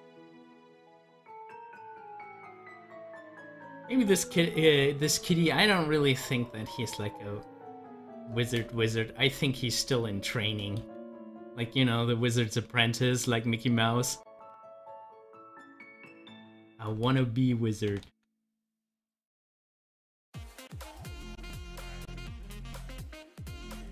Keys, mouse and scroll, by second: 0.0-1.9 drag, 1.9 ctrl+z, 5.3 ctrl+z, 17.0 z, 18.0 ctrl+z.